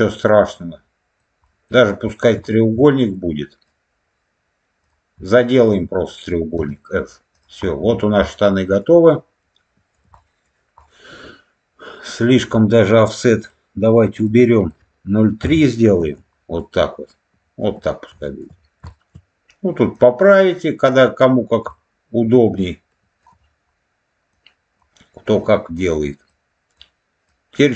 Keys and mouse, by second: 1.4 middle click, 2.0 middle click, 2.4 shift+middle click, 3.0 middle click, 4.7 click, 5.5 shift+click, 6.5 f, 7.2 click, 8.1 middle click, 9.0 middle click, 10.1 middle click, 10.7-12.3 middle drag, 13.3-16.1 drag, 16.5-17.5 middle drag, 18.1 shift+middle click, 18.8 shift+middle click, 19.8-20.8 drag, 21.6-23.1 middle drag, 24.2 click, 25.2 click, 26.2 click, 27.2 click.